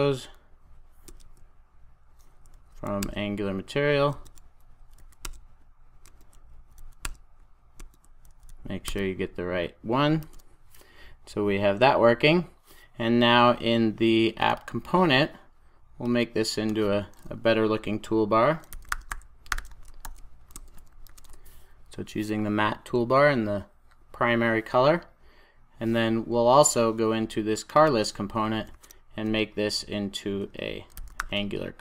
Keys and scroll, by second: 10.1 super+s, 20.1 super+j, 21.0 Return, 21.6 super+s, 28.6 super+a.